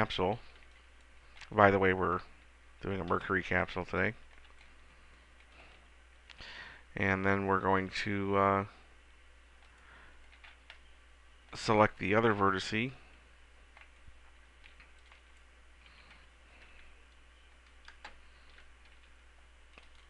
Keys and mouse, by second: 0.8 b, 3.5 click, 5.0 middle click, 6.8 g, 9.9-10.9 drag, 13.5-14.9 middle drag, 14.9 b, 16.1 s, 19.2 ctrl+z.